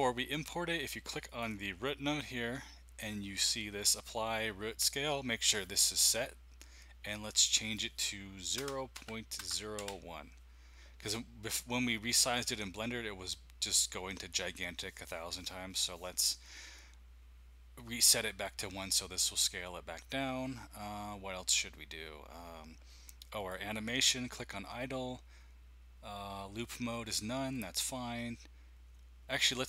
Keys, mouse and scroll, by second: 1.4 click, 7.5 click, 8.6 KP_0, 8.9 KP_Decimal, 9.4 KP_0, 9.8 KP_1, 23.4-24.4 drag.